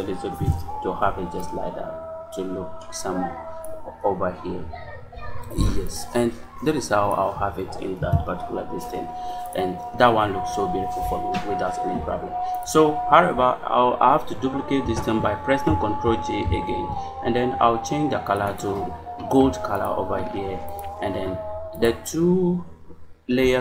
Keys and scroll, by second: 0.3 Return, 7.9 Return, 16.3 ctrl+j.